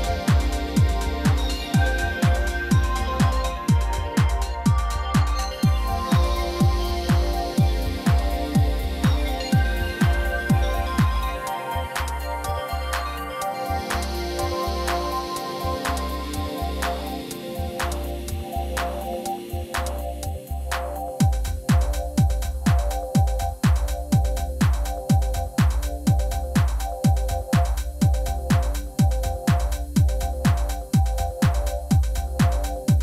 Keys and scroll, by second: 10.1 shift+s, 12.0 Tab, 12.2 shift+z, 12.7 1, 12.8 Caps_Lock, 14.1 shift+z, 14.7 g, 14.8 y, 15.4 Tab, 16.4 Caps_Lock, 18.9 Tab, 19.3 shift+z, 20.0 shift+z, 20.6 g, 20.7 x, 22.0 Tab, 24.6 shift+z, 25.1 g, 25.2 y, 27.0 Tab, 29.1 g, 29.2 y, 32.0 Tab, 32.1 shift+z.